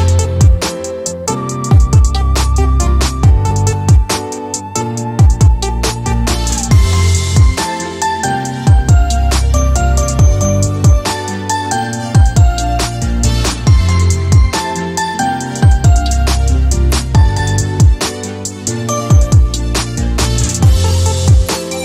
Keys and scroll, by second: 3.3 e, 16.9-18.3 typing.